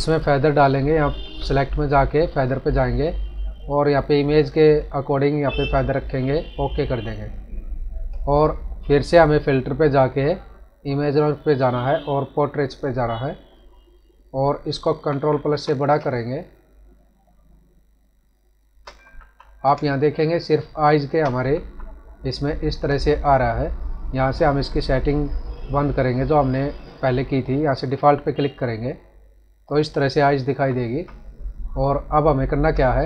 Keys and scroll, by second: 14.9 ctrl+=, 15.9 space, 19.1 ctrl+-, 19.7 space, 21.5 ctrl+-, 30.4 ctrl+=, 31.8 space.